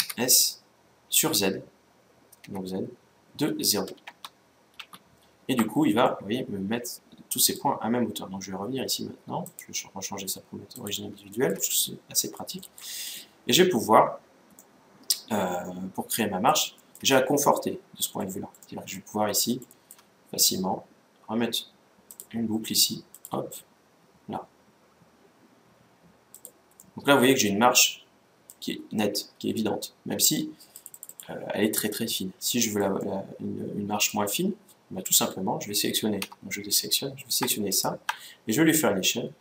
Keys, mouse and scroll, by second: 5.8-7.5 middle drag, 9.2-11.0 drag, 11.1-15.9 middle drag, 16.5-21.1 middle drag, 21.8-23.5 drag, 23.6 click, 26.5-28.2 middle drag, 28.6-29.2 scroll up 1, 29.2-30.5 middle drag, 30.5-32.6 drag, 30.7-31.1 scroll down 1, 32.4-34.4 middle drag, 34.5 middle click, 35.9 a, 37.4-39.1 right drag, 39.3 s.